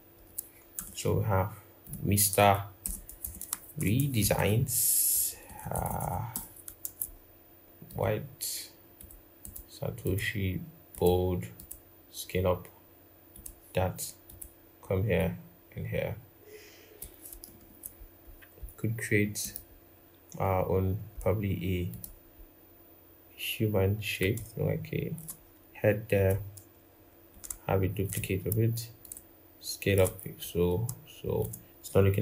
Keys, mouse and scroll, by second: 0.5 typing, 2.8-5.6 typing, 9.2 double click, 17.2 ctrl+=, 17.4 ctrl+=, 18.0-20.3 scroll, 27.1 alt+click, 28.8 shift+click.